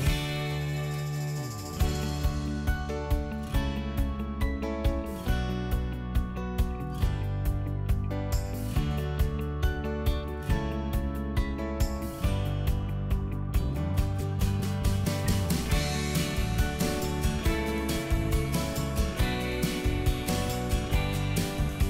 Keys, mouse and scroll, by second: 0.1 click, 1.3 ctrl+click, 3.5 KP_7, 4.3-7.0 middle drag, 7.0 typing, 7.4 click, 8.3 Delete, 9.0 click, 9.2 right click, 10.3 click, 10.6 middle click, 11.9 click, 12.3 shift+click, 12.6 shift+click, 12.9 shift+click, 13.7 shift+click, 14.0 shift+click, 14.2 right click, 15.7 click, 16.0 middle click, 17.7-18.0 scroll up 1, 18.0 click, 18.4 shift+click, 18.7 shift+middle click, 19.6 shift+click, 21.1 middle click, 21.7 shift+middle click.